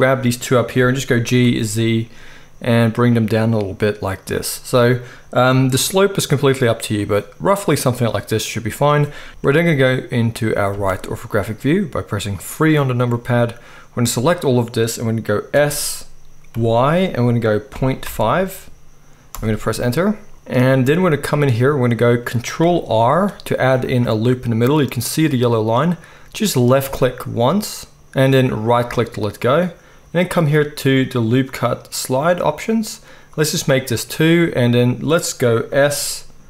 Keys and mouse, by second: 0.7 g, 4.3 middle click, 4.8-7.0 drag, 5.4 g, 7.0-9.3 middle drag, 9.3 alt+a, 9.3-31.2 drag, 9.3 KP_1, 10.7 KP_3, 15.5 s, 20.3 KP_3, 23.1 ctrl+r, 31.4-36.4 drag, 35.7 s.